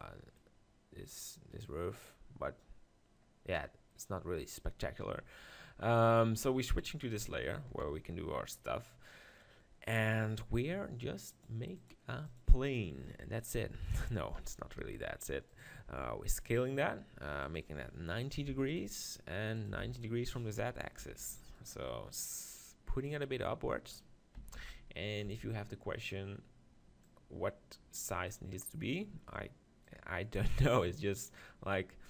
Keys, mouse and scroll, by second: 0.4 middle click, 1.6-3.4 right drag, 3.3 middle click, 5.4-6.7 middle drag, 6.7-8.4 drag, 7.7 KP_7, 9.7-11.0 middle drag, 11.7-13.2 drag, 14.4 f, 14.8 g, 15.9 s, 17.4-19.3 drag, 19.6-21.4 drag, 21.0 g, 23.1-24.9 drag, 24.4 s, 25.2-26.9 drag, 25.3 s, 27.0-28.8 drag, 28.8 middle click, 29.9-31.8 drag, 29.9 middle click, 30.8-31.8 middle drag.